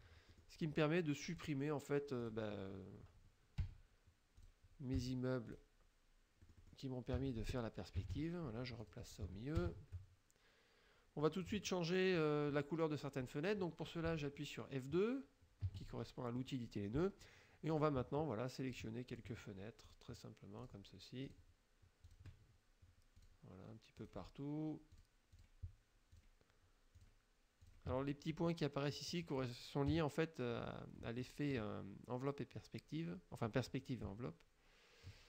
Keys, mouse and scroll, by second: 0.4 shift+click, 2.3 click, 3.7 Delete, 4.4 click, 5.0 Delete, 5.6 click, 6.5 middle click, 6.5-6.9 scroll down 1, 7.2 Delete, 8.0 KP_Subtract, 8.9 click, 9.7 shift+Left, 11.5 click, 15.7 F2, 16.4 click, 17.8 click, 18.8 shift+click, 19.2 shift+click, 19.9 shift+click, 20.7 shift+click, 21.3 shift+click, 22.1 shift+click, 23.2 shift+click, 24.0 shift+click, 25.0 shift+click, 25.4 shift+click, 26.2 shift+click, 27.0 shift+click, 27.7 shift+click, 29.0 click, 29.9 KP_Subtract, 31.0 click, 35.1 shift+click.